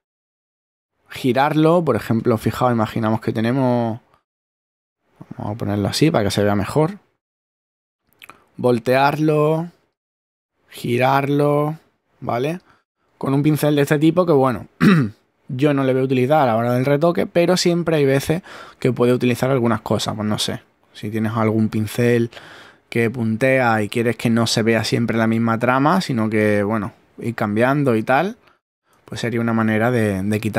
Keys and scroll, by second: 0.0-0.8 typing, 29.1 super+z.